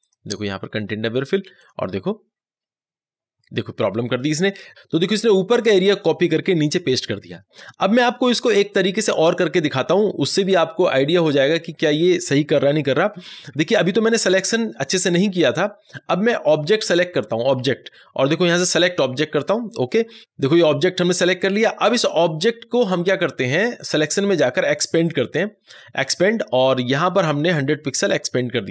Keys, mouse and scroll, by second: 16.6 ctrl+z, 23.7 click.